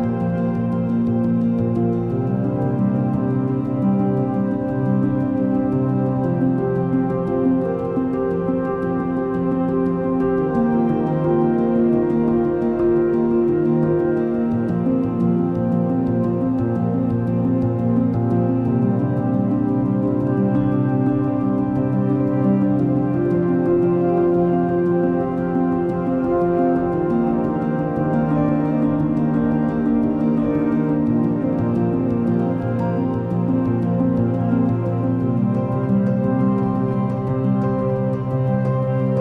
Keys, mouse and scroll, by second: 2.9 click, 3.9-5.8 scroll up 4, 5.8-6.7 scroll down 5, 8.6 drag, 9.9 drag, 11.0-14.5 drag, 14.5-15.3 scroll down 4, 16.3 click, 18.3-20.5 drag, 25.8-29.2 drag, 29.9-34.2 drag, 34.2 r.